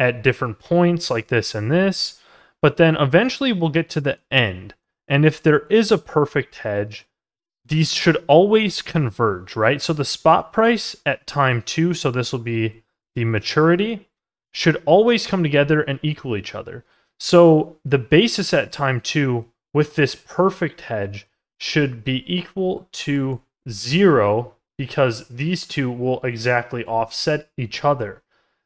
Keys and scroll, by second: 1.3 ctrl+z, 27.4 ctrl+z.